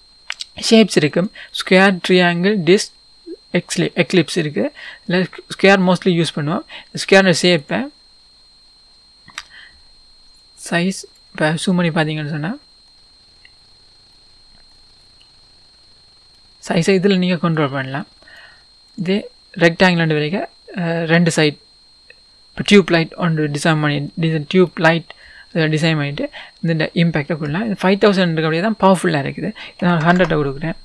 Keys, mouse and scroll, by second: 4.0-4.8 scroll down 1, 4.8 scroll down 1, 5.0-13.0 drag, 11.6-12.3 scroll up 1, 12.3-12.9 scroll up 1, 13.0-17.7 middle drag, 17.7-24.1 drag, 23.1-24.1 scroll down 2, 24.1 scroll down 1, 24.1-30.8 middle drag, 25.5-26.0 scroll up 2, 26.0-27.2 scroll down 2, 27.2-30.6 scroll down 1, 30.6-30.8 scroll down 1.